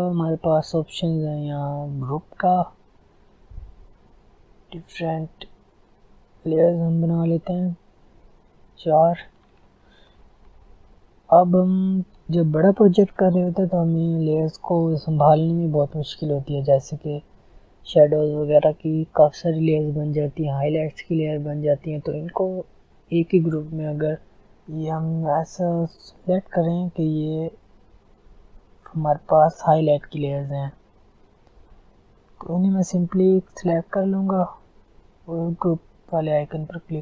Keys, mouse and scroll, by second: 3.1 click, 3.2 click, 8.1 click, 9.2-11.1 scroll down 1, 24.5 shift+click.